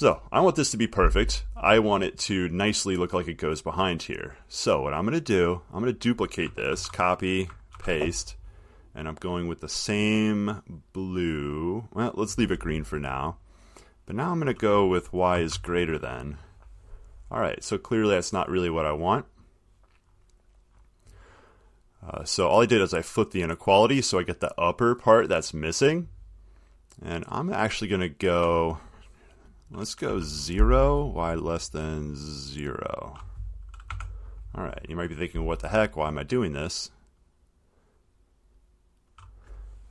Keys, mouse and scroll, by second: 2.1 middle click, 2.1 middle click, 3.6-4.5 middle click, 5.4 click, 6.3 click, 6.9 ctrl+c, 7.4 click, 8.0 ctrl+v, 9.8 click, 10.9 click, 11.7 click, 13.0 click, 14.6 click, 15.7 >, 19.6 middle click, 23.8 click, 28.4 click, 30.3 0, 33.3 click, 34.1 0, 34.9 middle click, 38.3 click, 39.4 click.